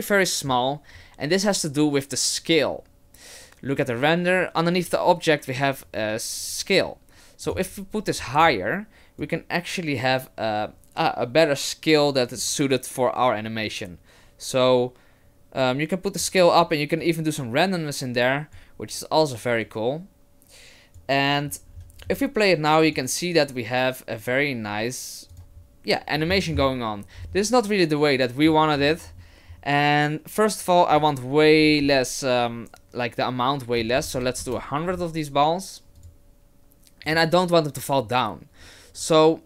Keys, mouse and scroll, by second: 7.5 click, 9.2 click, 17.0 click, 19.6 click, 21.7-22.6 scroll down 7, 22.8 click, 25.4 click, 26.2-27.1 scroll down 7, 27.1-27.5 scroll down 5, 28.5-30.9 scroll up 13, 30.9 click, 34.1 KP_0, 36.0 click, 37.1 click.